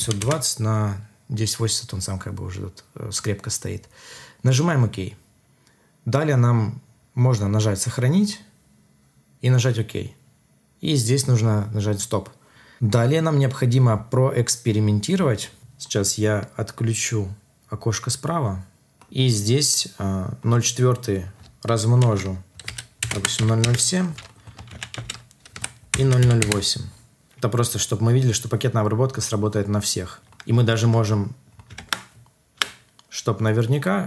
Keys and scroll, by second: 22.6 F2, 23.6 Return, 24.6 ctrl+c, 24.9 ctrl+v, 25.5 F2, 26.3 Return, 31.7 alt+Tab, 32.5 alt+Tab.